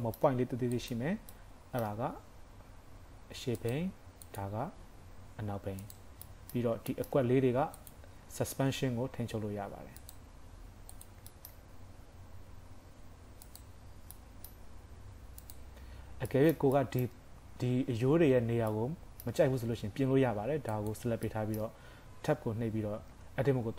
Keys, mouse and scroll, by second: 0.0 shift+middle click, 0.7 click, 1.4 middle click, 2.1 g, 4.3 click, 4.7 g, 6.3 middle click, 6.7 scroll up 1, 7.0 shift+middle click, 7.3 scroll up 2, 7.8 click, 8.1-8.8 scroll down 3, 8.6 g, 10.4 scroll up 4, 11.0 click, 11.3 shift+middle click, 11.7 g, 13.8-14.6 scroll down 5, 14.1 middle click, 14.6 g, 16.3 shift+middle click, 20.7 click, 21.3 middle click, 23.1 Tab.